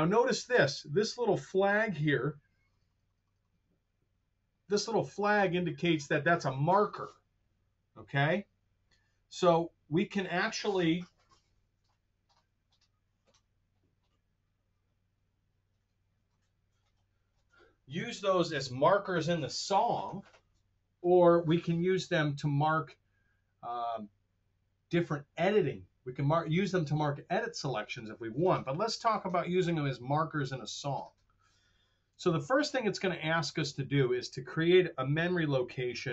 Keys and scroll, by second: 32.2 super+Tab, 32.7 super+Tab.